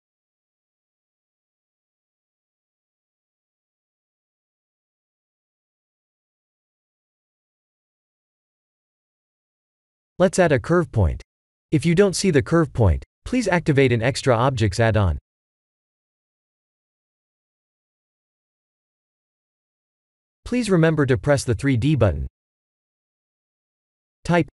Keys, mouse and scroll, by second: 1.9 click, 2.7-6.6 drag, 8.2 click, 9.7 shift+a, 24.2 click.